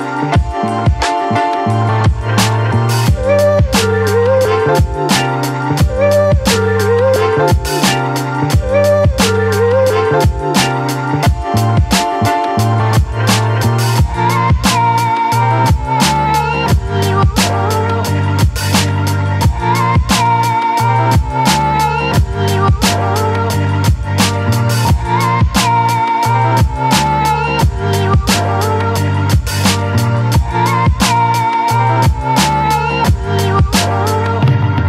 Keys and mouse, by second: 1.5 click, 2.1 click, 2.4 click, 2.7 click, 4.0 middle click, 4.7 middle click, 5.4 shift+middle click, 5.6 middle click, 7.5 click, 8.4 ctrl+z, 8.5-8.9 [, 9.0 click, 9.4 click, 9.7 click, 10.0 click, 10.4 click, 10.8 click, 11.7 click, 12.2 ], 12.4 click, 13.1 ctrl+z, 13.5 click, 14.2 [, 14.5 click, 15.1 ctrl+z, 15.4 [, 15.5 [, 15.5 click, 16.4 click, 17.5 ], 17.8 ], 17.9 ], 17.9-19.7 drag, 20.9 middle click, 21.5 middle click, 22.7 middle click, 23.0 shift+middle click, 23.5 click, 23.6 middle click, 25.8 middle click, 28.2 ctrl+i, 28.9-31.9 typing, 33.8 b, 34.7 b.